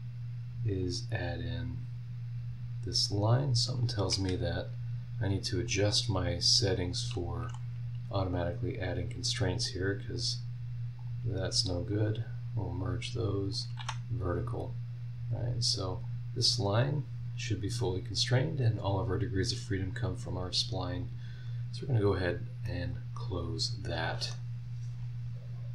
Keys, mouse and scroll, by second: 0.8 click, 1.4 scroll down 1, 3.7 click, 4.2 Escape, 4.6-5.2 scroll up 2, 5.6 click, 6.8 click, 7.4 h, 7.9 scroll down 2, 8.5-8.8 scroll up 2, 9.6 click, 11.0 click, 11.8 click, 12.8 click, 13.5 click, 13.8 v, 14.3 scroll down 2, 14.7 scroll up 2, 15.3 click, 16.0-17.1 drag, 17.3-17.6 scroll down 2, 17.6 scroll up 2, 18.6 scroll down 2, 20.9 click, 22.6-24.5 middle drag, 22.9-24.5 drag, 22.9-24.5 right drag.